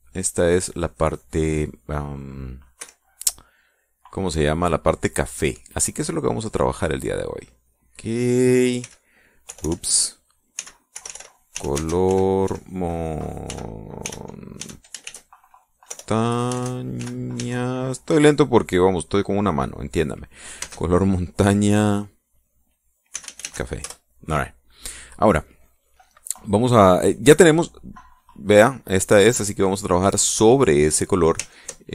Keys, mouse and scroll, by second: 0.4 click, 0.7 click, 1.2 click, 1.5 click, 2.0 click, 3.5 Escape, 4.5 click, 6.1 click, 7.2 click, 8.1 click, 9.5 x, 11.0-15.7 typing, 17.7 shift+n, 18.0 shift+a, 21.3 space, 23.5-24.5 typing, 28.7 click, 29.5 click, 30.1 click.